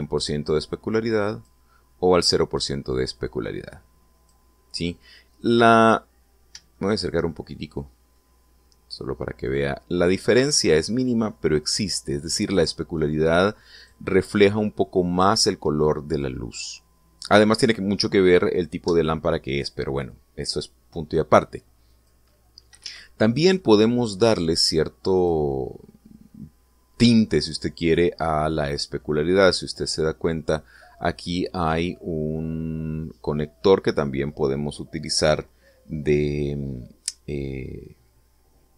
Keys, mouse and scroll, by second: 0.8-2.5 drag, 4.2 click, 6.8-7.4 scroll up 1, 7.6-9.2 shift+middle drag, 10.3-11.5 drag, 13.8 click, 22.8 click, 23.7 Escape, 24.5-26.3 drag.